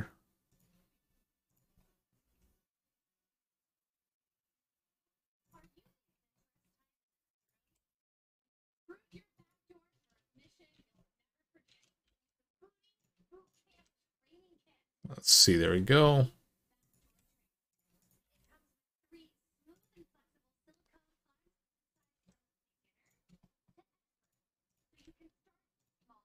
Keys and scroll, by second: 2.0 g, 7.4 g, 10.5 alt+z, 11.5 alt+z, 11.8 g, 13.5 g, 16.8 g, 18.0 g, 21.9 g, 24.7 g.